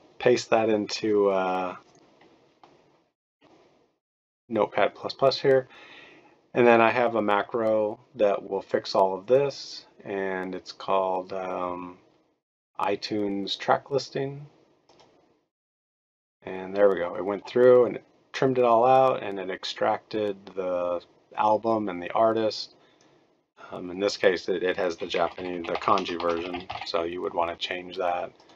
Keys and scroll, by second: 24.9-27.2 typing.